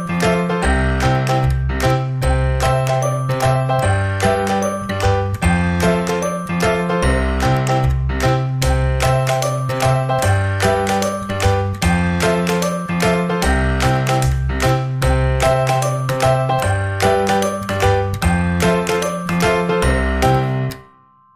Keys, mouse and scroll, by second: 0.6-3.5 drag, 3.3 KP_0, 5.2-6.4 middle drag, 7.0-8.3 drag, 9.6-13.0 drag, 13.8-16.8 drag, 17.4-19.2 drag.